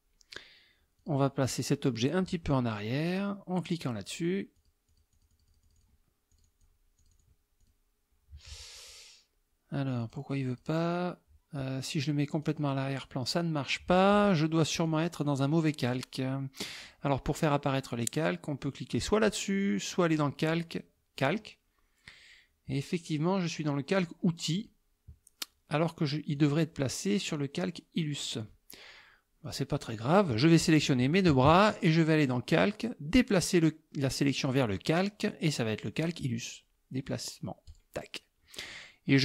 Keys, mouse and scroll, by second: 1.0 click, 3.1 click, 4.1 click, 4.6 click, 6.3 click, 7.0 click, 7.6 click, 10.0 click, 12.5 click, 14.9 click, 15.9 click, 20.1 click, 21.2 click, 24.0 click, 24.6 click, 26.4 click, 29.5 click, 30.5 click, 31.2 shift+click, 32.3 click, 34.5 click, 36.1 click, 37.7 click, 38.7 click.